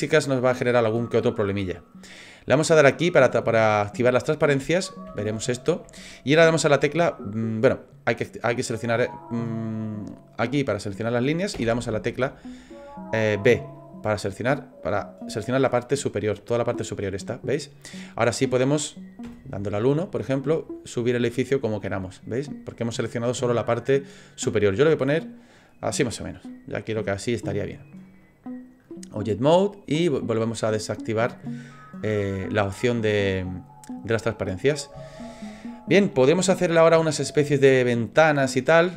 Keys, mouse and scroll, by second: 3.3 click, 4.7 scroll up 4, 5.2 shift+middle click, 10.0 click, 11.5 b, 17.0 middle click, 17.6 scroll down 1, 18.4 middle click, 18.4 scroll down 4, 19.2 KP_1, 20.5 click, 26.5 middle click, 27.8 click, 31.4 middle click, 32.5 scroll up 1, 32.9-33.8 scroll down 1, 34.5 middle click, 35.1 shift+middle click, 35.6 middle click.